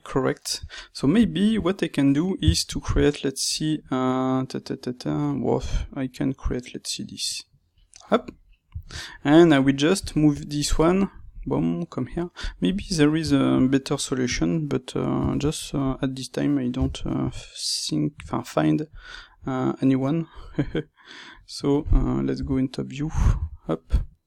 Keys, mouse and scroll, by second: 0.7-12.3 middle drag, 12.3 click, 12.9-18.9 ctrl+middle drag, 15.8 shift+Tab, 16.7 g, 18.9 click, 19.1-22.3 middle drag, 22.3 KP_7, 23.3 g.